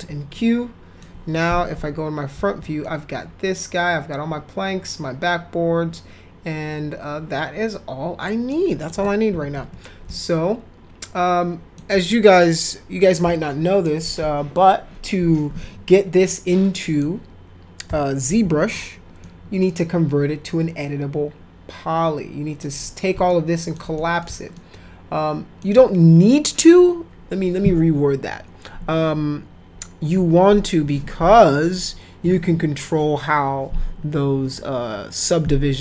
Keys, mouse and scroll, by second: 0.3 alt+middle click, 1.5 f, 1.8 z, 2.9-8.5 alt+shift+middle drag, 8.7 alt+shift+middle click, 9.3 f, 9.6 z, 10.1-11.8 alt+middle drag, 13.3 alt+middle click, 16.5 alt+middle click, 17.9 p, 18.4 z, 19.2-22.6 alt+middle drag, 23.3 alt+middle click, 23.9 middle click, 24.6-25.6 alt+middle drag.